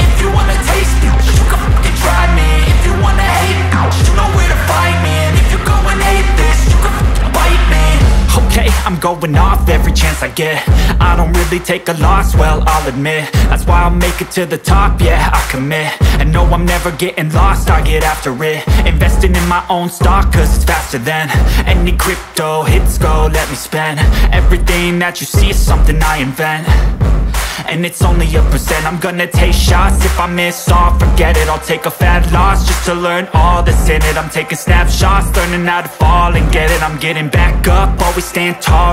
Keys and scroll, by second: 4.9 Down, 7.2 ctrl+-, 7.8 space, 9.6 Right, 19.6 Right, 32.3 Left, 32.5 Down, 32.6 Left, 32.9 Right, 33.4 ctrl+c, 33.6 ctrl+v, 35.6 Up, 35.8 Left, 36.5 ctrl+v.